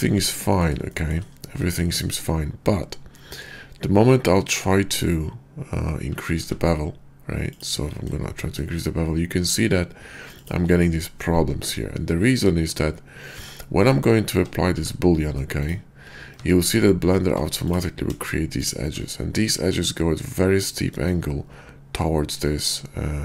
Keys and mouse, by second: 0.9 shift+drag, 1.7-2.0 shift+drag, 6.2 q, 10.4 shift+click, 13.3 Tab, 14.3 Tab, 14.7 q, 16.4 Tab, 17.2 Tab, 17.6 click.